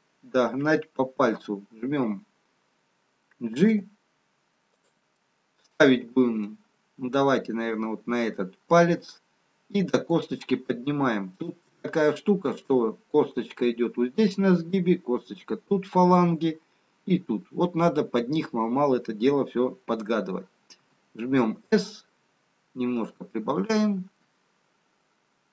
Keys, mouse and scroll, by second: 4.9 g, 5.3 middle click, 8.3-8.7 scroll down 3, 10.2 g, 10.6 scroll up 3, 12.0 shift+middle click, 12.0 scroll up 1, 17.6-19.3 scroll down 1, 22.9 s.